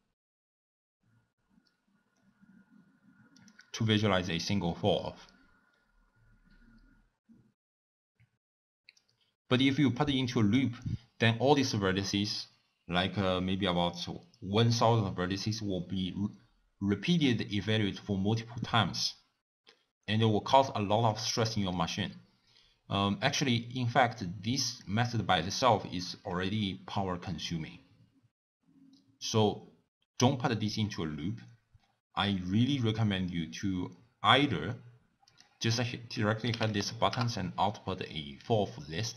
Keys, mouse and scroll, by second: 3.4 click, 38.6 l.